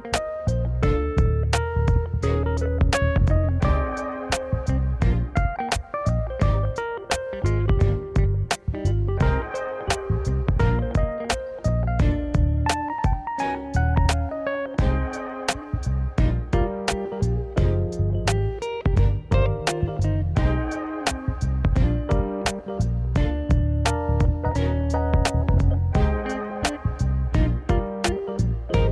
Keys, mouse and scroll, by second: 1.4 s, 4.2 e, 5.6 g, 7.6 click, 7.8 middle click, 8.5 click, 10.0 x, 11.4-14.1 middle drag, 14.4 alt+click, 14.8 click, 15.2 click, 16.6 g, 20.5 alt+click, 21.2 s, 22.4 click, 23.0 alt+click, 24.1 g, 28.2 alt+click.